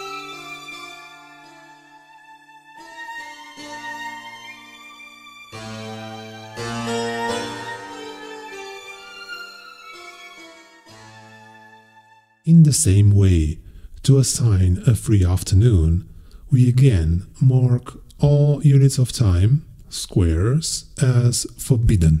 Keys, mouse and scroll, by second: 2.7 scroll up 2, 5.9-6.5 scroll up 4, 7.5-8.2 scroll up 2, 17.1 click, 17.6-18.3 scroll up 4, 18.7-19.0 scroll up 2.